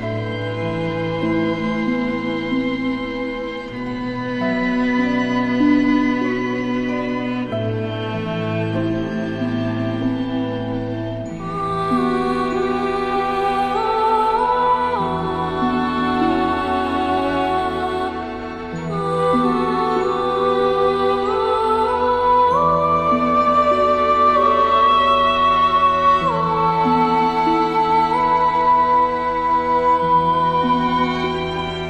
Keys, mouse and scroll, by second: 2.8 ctrl+shift+], 3.5 click, 4.2 alt+scroll down 1, 4.6 space, 4.7 click, 5.1 space, 6.1 click, 6.6 space, 6.7 click, 6.8 space, 7.4-7.7 alt+scroll, 7.7-10.6 drag, 11.7 space, 11.9 click, 12.7 alt+scroll up 1, 13.3-13.9 drag, 18.8 click, 19.5 alt+scroll up 1, 19.9 space, 20.0-22.4 drag, 24.3 alt+scroll down 2, 24.9-25.3 click, 25.0 space, 25.9 click, 26.3 alt+scroll down 1, 26.9-28.1 click, 27.5 space, 28.4-29.8 drag, 30.0 space, 30.2 click, 30.6-31.3 space.